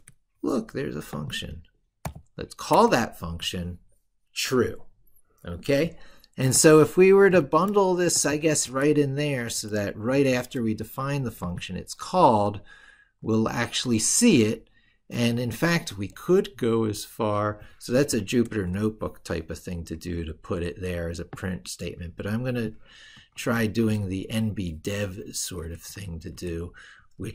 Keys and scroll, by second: 7.1 ctrl+x, 10.0 ctrl+v, 23.2 ctrl+x.